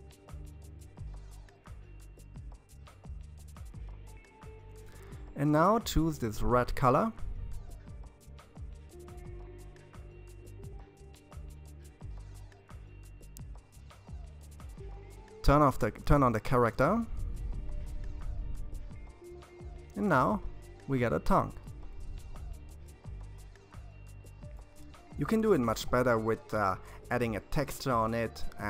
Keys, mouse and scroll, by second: 5.2-8.3 middle drag, 8.3-8.7 scroll down 4, 8.7-11.8 middle drag, 15.1 click, 16.3-19.5 middle drag, 22.4-24.0 scroll down 3, 24.0-27.2 middle drag.